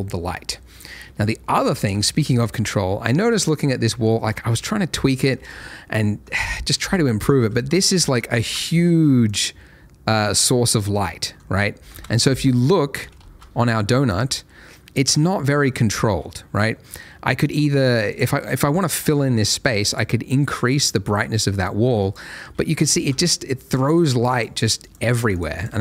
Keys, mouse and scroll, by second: 0.5 middle click, 1.2 shift+middle click, 2.0 middle click, 2.7 shift+middle click, 3.4 middle click, 9.3 click, 11.8 Escape, 11.9 KP_0, 12.1 Escape, 13.2 ctrl+shift+a, 17.4 click, 23.6 click, 23.9 double click.